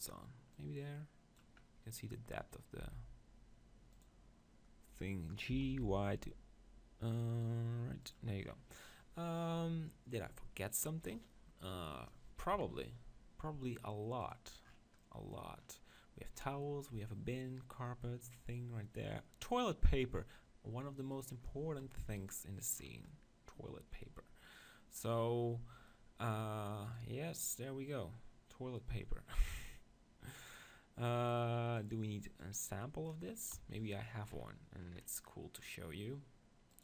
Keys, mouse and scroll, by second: 0.5-2.8 drag, 2.8 s, 4.0-5.8 drag, 5.5 g, 8.1-9.9 drag, 9.9-11.1 middle drag, 11.1-12.5 scroll up 1, 12.5 middle click, 12.5 KP_7, 14.2-16.0 drag, 21.0 right click, 21.9 click, 23.3-25.0 middle drag, 26.2 middle click, 26.9 right click, 27.4 click, 28.3 right click, 28.4 click, 31.8-34.2 drag, 33.5 KP_1, 34.3-35.8 middle drag, 36.7 click.